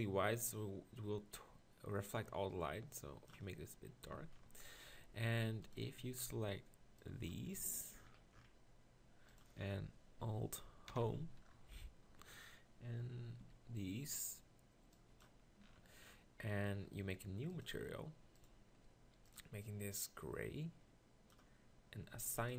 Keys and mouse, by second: 4.1 Tab, 5.2 z, 6.3 b, 10.9 alt+Home, 13.4 b, 15.6-16.7 middle drag, 17.5 click.